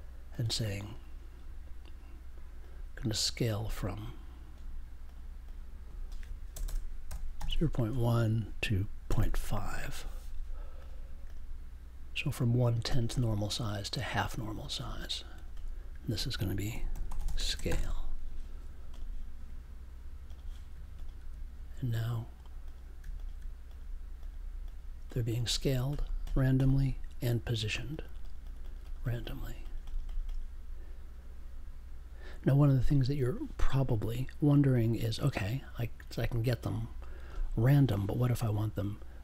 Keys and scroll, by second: 6.5 BackSpace, 7.0 0, 7.4 1, 7.9 space, 9.1 5, 16.7-18.3 typing.